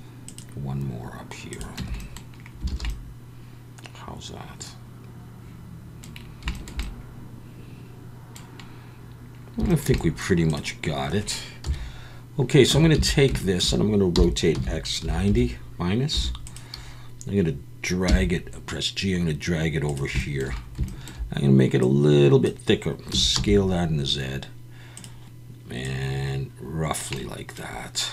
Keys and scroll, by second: 1.8 Tab, 2.7 alt+a, 11.6 KP_1, 12.7 Tab, 13.0 a, 14.1-16.1 typing, 18.1 g, 23.1 s, 23.3 z.